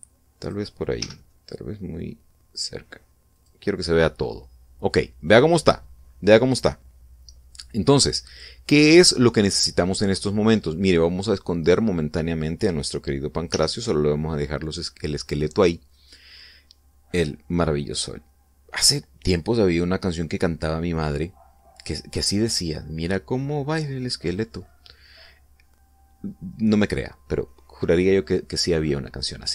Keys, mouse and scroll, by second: 1.1 click, 1.7 g, 1.8 middle click, 4.0 click, 11.9 right click, 14.2 h, 16.6 right click.